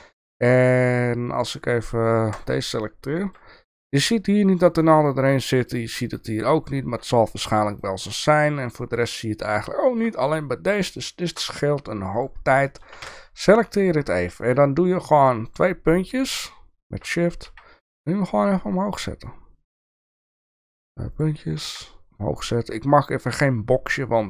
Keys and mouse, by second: 3.0-3.3 shift+middle drag, 4.8-5.7 shift+middle drag, 7.8-10.0 shift+middle drag, 11.2 shift+middle click, 12.1 click, 12.6 shift+middle click, 13.4 Tab, 13.7 click, 14.9 click, 17.4 g, 20.2 click, 20.6 click, 21.1 click, 21.6 g.